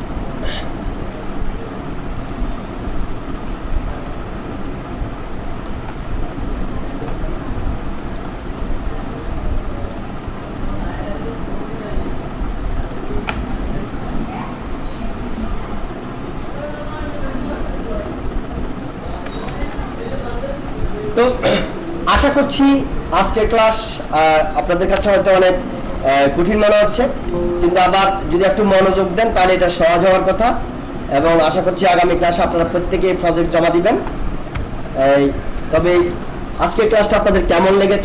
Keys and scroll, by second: 19.4 ctrl+z, 24.9 BackSpace, 32.2 ctrl+=, 34.5 shift+Left, 35.3 Right.